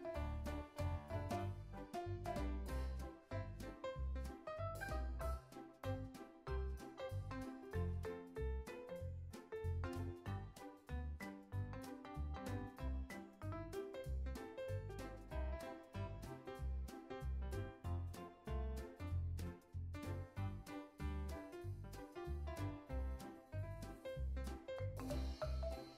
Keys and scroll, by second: 2.0 alt+shift+w, 3.0 alt+shift+s, 7.1 x, 9.5 super+z, 16.7 super+c, 18.7 super+v, 23.3 super+c, 24.3 super+v.